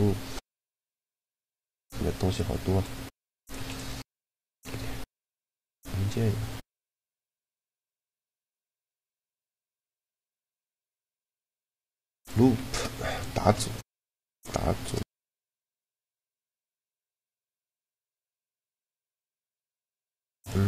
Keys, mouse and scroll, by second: 2.4 b, 3.4 x, 5.1-7.0 drag, 10.1 n, 10.3 t, 12.2 shift+d, 13.1 shift+d, 13.8-15.4 drag.